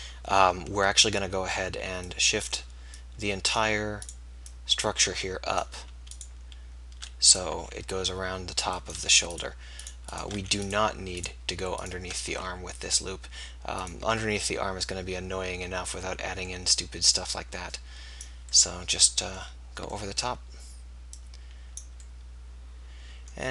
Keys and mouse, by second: 8.0 e, 10.7 f, 12.4 e.